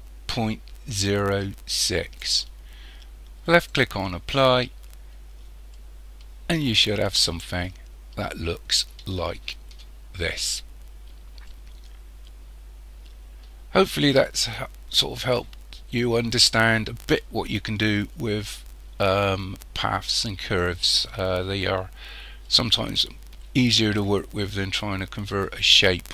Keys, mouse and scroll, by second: 3.5 click, 5.2-5.8 scroll down 1, 5.8-8.8 middle drag, 9.2-10.2 shift+middle drag, 10.2-11.5 scroll up 2, 11.5-14.5 middle drag, 21.3-22.5 scroll down 2, 22.5-25.5 middle drag.